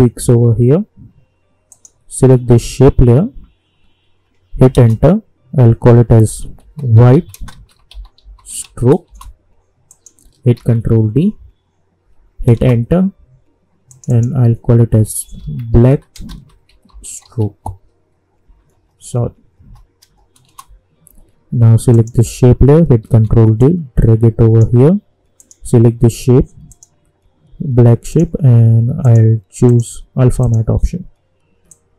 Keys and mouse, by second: 1.7 click, 4.7 Return, 5.9-9.1 typing, 9.9 click, 10.5 ctrl+d, 12.5 Return, 13.9 click, 14.7-17.9 typing, 20.4 Return, 21.9 click, 23.0 ctrl+d, 23.6-31.9 drag.